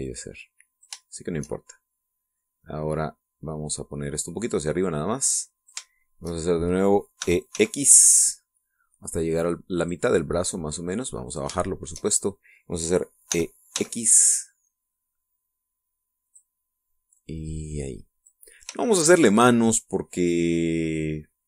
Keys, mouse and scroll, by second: 0.8 click, 1.8 shift+middle click, 2.5 shift+middle click, 3.4-4.8 middle drag, 5.6-6.7 drag, 6.7 shift+middle click, 8.0 e, 8.3 x, 10.6 click, 11.3-12.3 drag, 12.4 shift+middle click, 13.0 shift+middle click, 14.1 e, 14.5 x, 17.1 click, 17.9-19.3 drag, 19.6 shift+middle click, 21.0-21.3 scroll down 2.